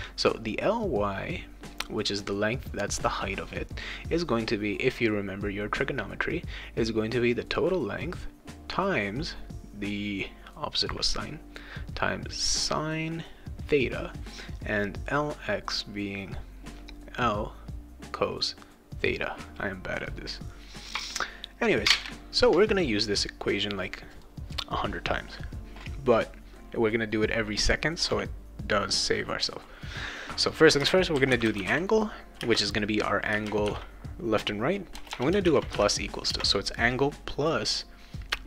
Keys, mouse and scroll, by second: 0.8 click, 7.3 click, 11.4 click, 12.0 click, 12.1 click, 12.4 click, 13.1 click, 14.6 click, 15.3 click, 15.5 click, 15.8 click, 16.0 click, 16.3 click, 17.1 click, 17.7 click, 18.0 click, 18.6 click, 24.1 click, 30.9-33.3 typing, 34.9 BackSpace, 35.4 shift+=, 36.3 space.